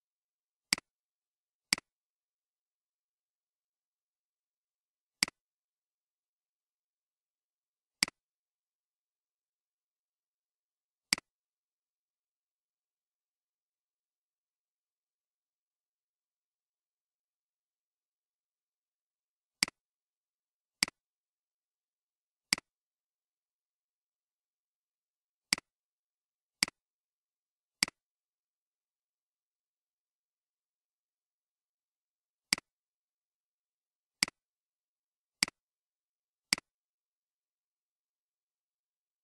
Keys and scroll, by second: 13.5-14.7 typing, 21.0 Delete, 37.8 1, 38.4 Return.